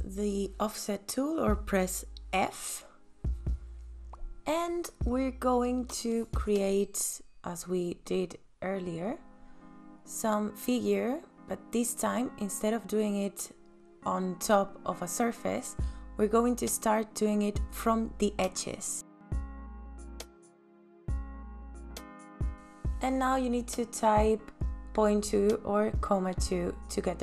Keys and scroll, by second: 1.8 f, 24.8 ,, 25.2 KP_2, 25.9 KP_Enter.